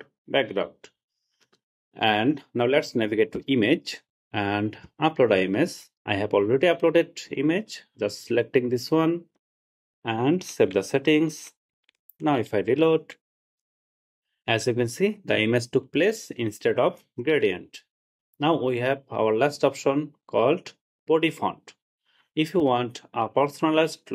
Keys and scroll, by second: 10.8 super+s, 12.5 super+r.